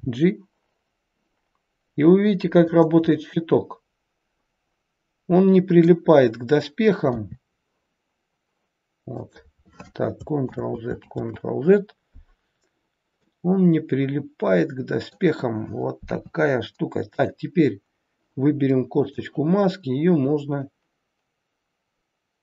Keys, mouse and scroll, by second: 3.2 middle click, 10.6 ctrl+z, 10.9 ctrl+z, 12.6-13.1 scroll down 2, 13.2 middle click, 15.9 KP_3, 17.1 click, 18.9 click.